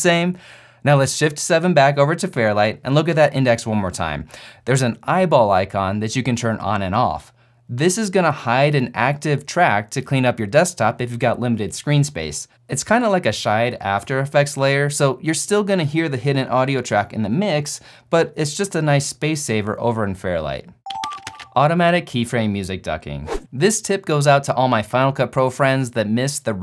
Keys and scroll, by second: 1.7 shift+7.